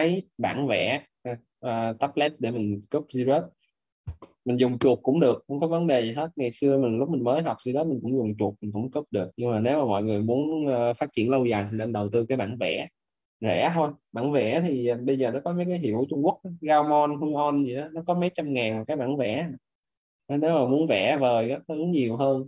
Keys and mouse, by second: 0.7 right click, 1.3 right click.